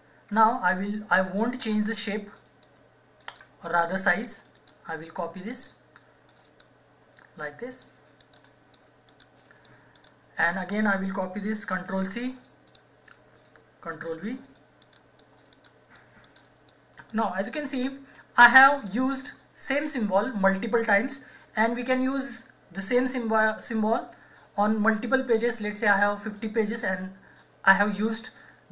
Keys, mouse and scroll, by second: 2.6 click, 3.3 right click, 4.2 click, 4.6 right click, 5.2 click, 5.5 right click, 6.3 click, 8.2 right click, 8.7 click, 9.1 right click, 9.6 click, 10.0 right click, 11.8 ctrl+c, 12.7 click, 13.9 ctrl+v, 14.6 click, 14.8 right click, 15.2 click, 15.2 click, 15.5 right click, 16.0 click, 16.2 right click, 16.7 click, 17.1 right click, 18.8 click.